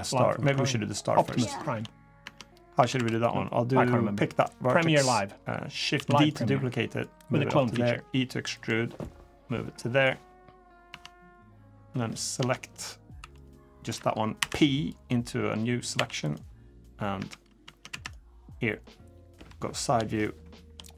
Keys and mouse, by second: 0.2 Tab, 0.4 click, 0.9 Tab, 1.2 shift+click, 2.0 Tab, 2.6 Tab, 2.7 1, 3.2 click, 5.7 shift+d, 6.8 click, 7.5 e, 8.8-9.9 drag, 10.7 Tab, 11.4 click, 12.2 Tab, 12.4 click, 13.0 2, 14.1 p, 15.7 1, 16.1 drag, 16.9 Tab, 17.4 Tab, 17.7 1, 19.1 KP_3, 20.0-20.4 shift+drag.